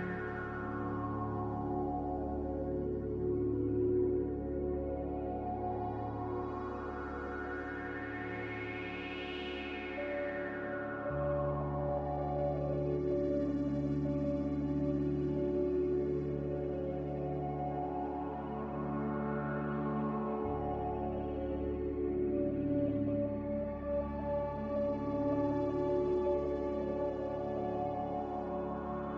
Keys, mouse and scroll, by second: 20.4 a, 22.4 5, 22.6 Return.